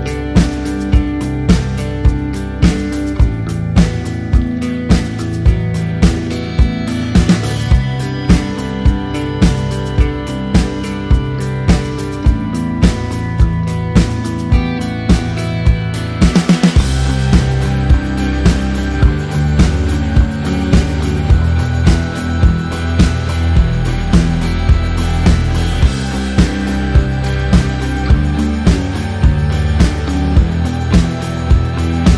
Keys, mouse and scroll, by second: 1.4 ctrl+click, 2.6 v, 2.7 click, 4.2 ctrl+d, 5.1 ctrl+click, 5.9 ctrl+], 6.5 ctrl+g, 7.1-7.9 typing, 8.1 click, 9.1-10.4 typing, 11.3 click, 12.7 ctrl+a, 13.8 click, 14.2 ctrl+d, 15.5 click, 16.9 KP_Add, 17.5-19.3 typing, 19.8 KP_Enter, 21.3 click, 22.5 Return, 23.3 click, 23.9-25.6 typing, 25.5 click, 25.8 ctrl+d, 27.3 shift+Down, 28.3 t, 28.9 click, 29.4-30.6 typing.